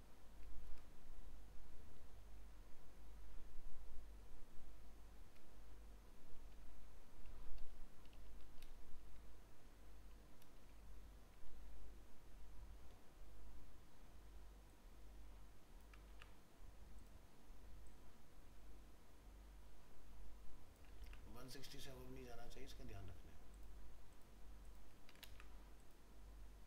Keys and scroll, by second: 16.1 ctrl+c, 21.0 ctrl+c, 25.0 ctrl+a, 25.2 ctrl+v.